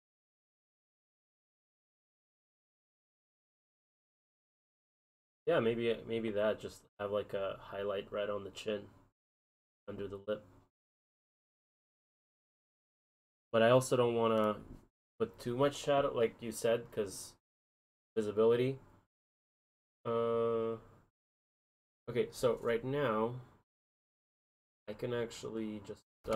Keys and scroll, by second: 6.3 ctrl+z, 13.0 ctrl+z.